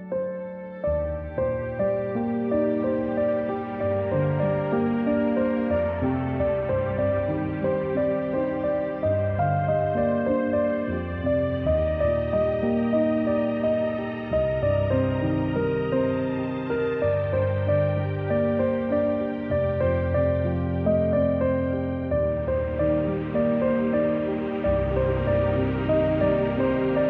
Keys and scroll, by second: 0.8-1.8 typing, 2.8-4.0 typing, 6.0 z, 7.2 v, 10.6 g, 16.3-18.1 typing, 19.8-20.4 typing, 24.0 =.